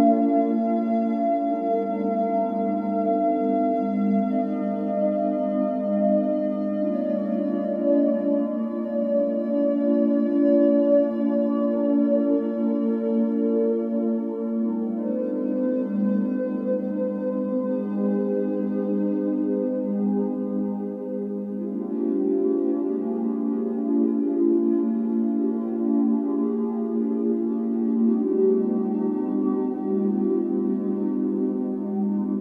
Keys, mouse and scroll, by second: 0.3-0.6 scroll up 3, 0.6-1.3 middle drag, 1.3 click, 1.6 alt+middle click, 1.8 alt+middle click, 2.3 Tab, 3.0 click, 3.3 l, 3.5-4.0 l, 4.2 l, 4.8 shift+d, 6.3 s, 7.0 g, 7.8 g, 8.8-9.9 middle drag, 9.9 g, 11.3 g, 13.2 click, 13.5 alt+middle click, 13.8 alt+middle click, 14.1 shift+middle click, 14.3-15.2 scroll up 2, 15.2 click, 15.3 l, 15.6 l, 16.5 ctrl+z, 17.2 l, 17.7 g, 18.9 click, 19.3 click, 20.4 1, 20.7 z, 21.1 b, 21.8 ctrl+b, 23.2 z, 23.5 scroll down 5, 23.7 Tab, 24.0-24.4 middle drag, 24.4-24.8 scroll down 5, 24.8 click, 25.2-26.6 scroll up 2, 26.6 click, 26.9 b, 27.6 o, 29.6 ctrl+s.